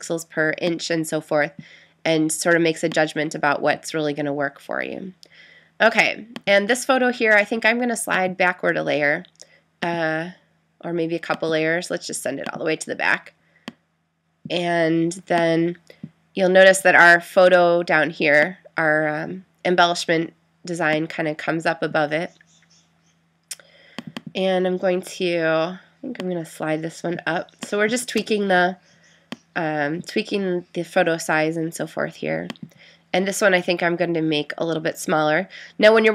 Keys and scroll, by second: 28.2 Return.